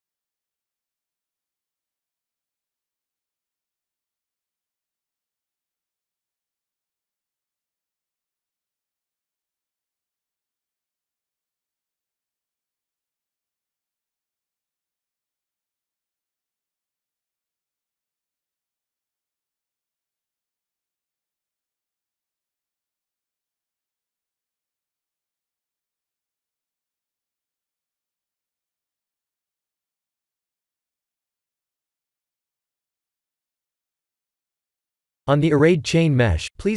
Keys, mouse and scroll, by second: 1.3 e, 5.2 a, 6.0 v, 6.9 Tab, 8.4 scroll up 3, 8.8 shift+middle click, 9.4-10.0 scroll up 4, 10.2 shift+middle click, 10.8-11.9 scroll up 3, 11.9 middle click, 13.5 click, 13.8 Tab, 14.7 click, 16.1 g, 20.9 Tab, 21.5 middle click, 25.5 Tab, 26.2 click, 27.0 g, 28.8 Tab, 29.5 middle click, 33.3 middle click, 33.6-35.7 scroll down 14, 35.7 click, 35.7 scroll down 2.